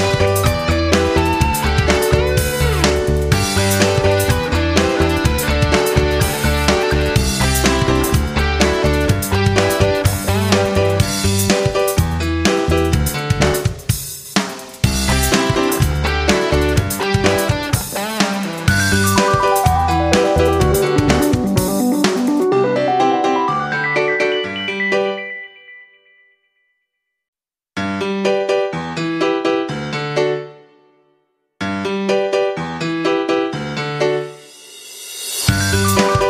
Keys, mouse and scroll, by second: 6.7 F9, 7.4 click, 7.7 click, 9.1-17.1 drag, 18.7 F9, 20.1-30.3 drag.